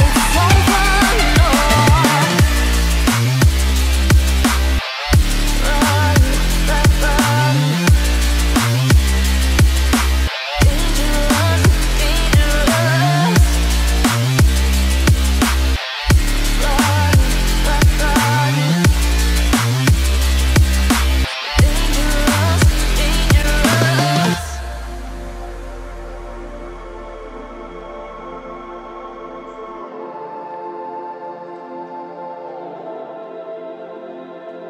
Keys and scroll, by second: 30.4 Return.